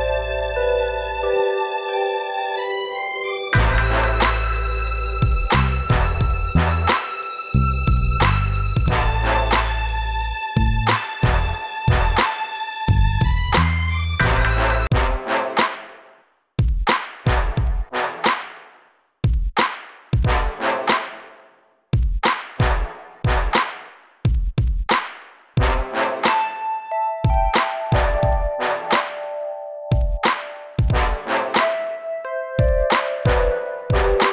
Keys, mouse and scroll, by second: 0.2 click, 0.3 click, 2.9 click, 3.0 click, 3.1 click, 3.2 click, 4.2 middle click, 5.3 click, 5.4 click, 6.1 click, 8.1 click, 9.4 click, 9.6 click, 11.1 click, 11.2 click, 12.4 scroll down 1, 13.2 click, 13.3 click, 14.0 click, 15.9 scroll up 1, 16.9 middle click, 25.4 click, 25.5 click, 26.5 scroll up 2, 29.4 click, 29.5 click, 32.1 scroll down 2, 33.1 click, 34.2 scroll up 2.